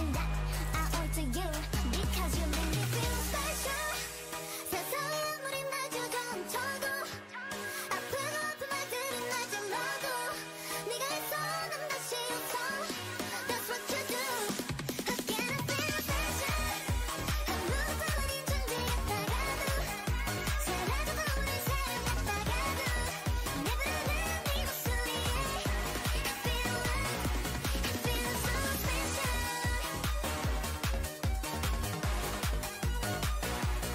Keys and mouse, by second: 1.3 e, 2.6 e, 3.5 e, 6.0 e, 7.4 e, 9.7 e, 11.1 e, 11.8 e, 12.6 e, 16.3 e, 17.2 e, 18.0 e, 19.8 e, 20.4 e, 22.3 e, 23.4 g, 24.0 e, 26.2 e, 27.1 e, 28.3 e, 30.6 e, 31.4 e, 32.1 e, 33.1 e.